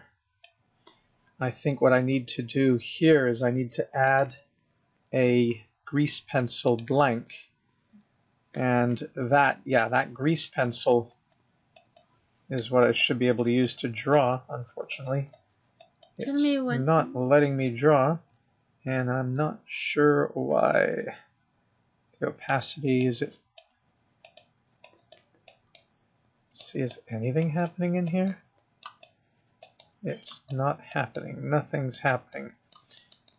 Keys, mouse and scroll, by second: 4.3 click, 10.9 click, 11.6 click, 12.2 click, 13.2 click, 13.9 click, 14.6 click, 15.6 click, 16.3 click, 22.7 click, 23.8 click, 24.6 click, 25.3 click, 25.9 scroll down 1, 26.0 middle click, 27.2 click, 27.9 click, 28.5 middle click, 29.3 click, 30.1 middle click, 30.8 click, 31.4 middle click, 32.5 middle click, 33.2 scroll up 1, 33.2 middle click.